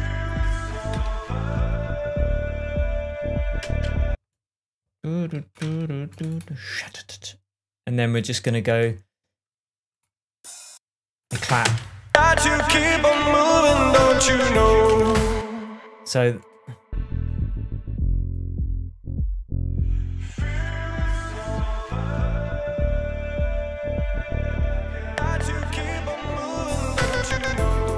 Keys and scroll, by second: 4.0 space, 6.0 BackSpace, 11.8 BackSpace, 12.0 space, 12.9 shift+space, 13.1 shift+Tab, 15.3 space.